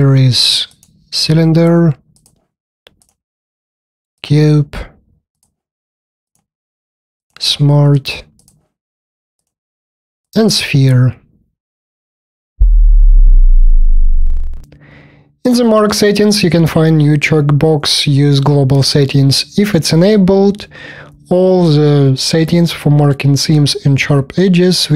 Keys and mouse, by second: 15.0 click.